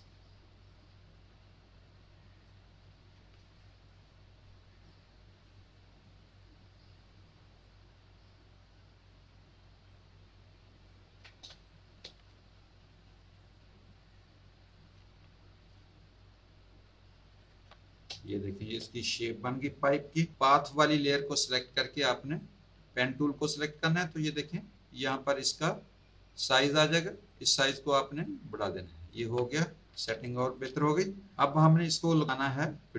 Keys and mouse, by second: 0.7 alt+click, 4.8 ctrl+click, 6.3 ctrl+click, 7.6 ctrl+click, 11.6 click, 13.4 ctrl+click, 15.7 alt+click, 18.1 space, 18.2 click, 20.5 click, 23.4 p, 27.1 click, 28.1 click, 29.1 z, 29.3 click, 30.1 space, 30.2 click, 31.5 click.